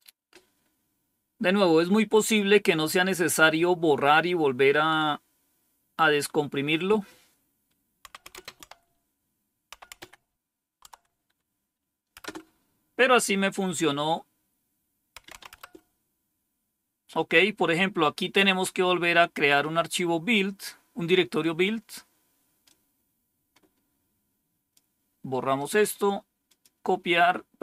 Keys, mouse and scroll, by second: 7.8-10.4 typing, 10.8 Tab, 12.1 Return, 14.9-15.8 typing, 18.7-19.3 scroll down 1, 22.5-24.7 drag, 25.5 right click, 26.4 click.